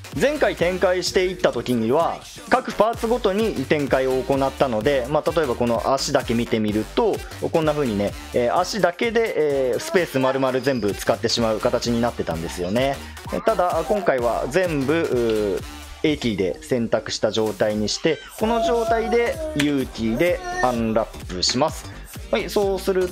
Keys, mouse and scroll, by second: 15.3 a, 21.6 u.